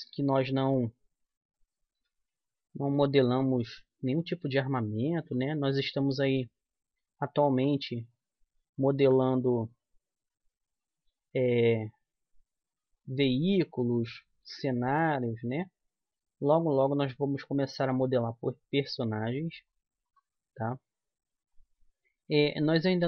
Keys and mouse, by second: 1.9 e, 5.6-7.4 right drag, 6.4-8.2 drag, 8.9-11.2 right drag, 11.2 e, 14.0-16.1 right drag, 15.6 click.